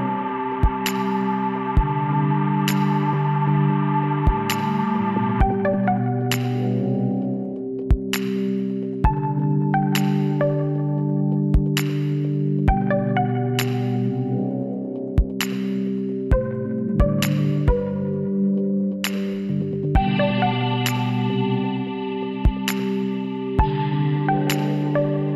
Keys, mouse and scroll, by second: 3.3 ctrl+z, 3.8 ctrl+z, 4.3 ctrl+z, 4.8 ctrl+z, 5.3 ctrl+z, 5.8 ctrl+z, 6.4 ctrl+z, 7.5 x, 9.4-11.1 middle drag, 11.1 l, 11.7 middle click, 12.4 KP_1, 13.7 shift+d, 16.5-18.4 drag, 18.4-20.6 middle drag, 20.6 r, 24.3-25.3 middle drag.